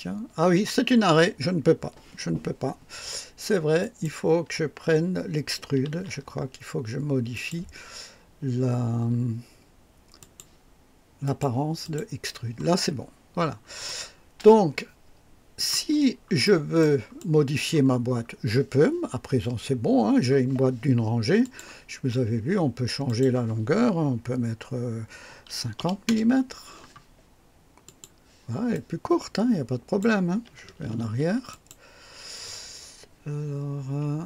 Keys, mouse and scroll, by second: 3.8 click, 5.9 ctrl+d, 7.3 click, 10.2 click, 11.2 click, 11.8 click, 12.9 scroll up 1, 13.3 scroll down 1, 13.8-15.8 drag, 16.0 scroll up 1, 16.4 right click, 17.2-17.8 drag, 18.1-18.7 scroll down 1, 21.4 click, 23.0 click, 25.4 KP_5, 25.8 KP_0, 26.0 Return, 26.1 Return, 27.8 click, 28.7-30.2 drag, 31.0 ctrl+z, 31.5 ctrl+click.